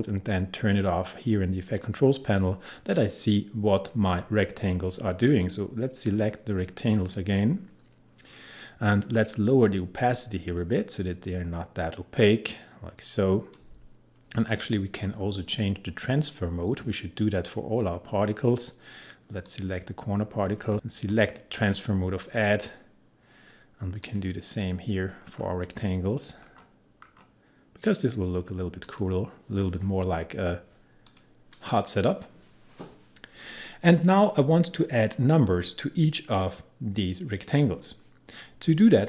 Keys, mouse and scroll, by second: 6.1 click, 8.6-10.0 scroll down 1, 10.0-15.1 drag, 15.1-15.7 scroll down 1, 19.5 click, 25.1-26.5 scroll down 1, 27.9 click, 32.1-32.8 scroll up 1, 32.8-34.6 scroll down 1.